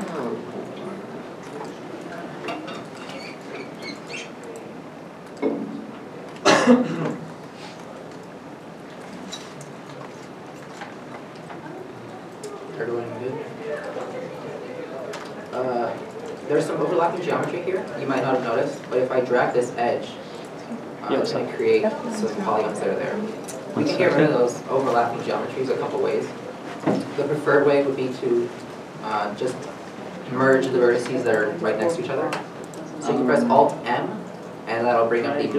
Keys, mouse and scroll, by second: 10.0-10.5 scroll down 1, 10.7-11.3 scroll, 11.3 middle click, 11.7 scroll up 1, 14.0 middle click, 14.9 scroll down 1, 16.0 shift+middle click, 17.5 scroll up 1, 19.1 middle click, 22.4 right click, 22.8 g, 23.8 right click, 23.9-24.5 scroll down 1, 24.8 a, 27.7 scroll up 1, 33.6 scroll, 33.9 alt+m.